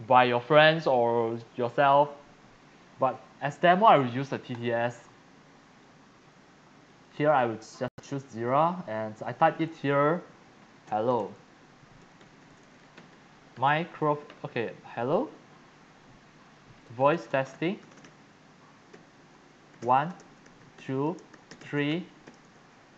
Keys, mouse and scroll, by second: 4.8-6.5 drag, 6.9 click, 8.4 click, 9.2 click, 10.6-14.8 typing, 16.6-22.9 typing.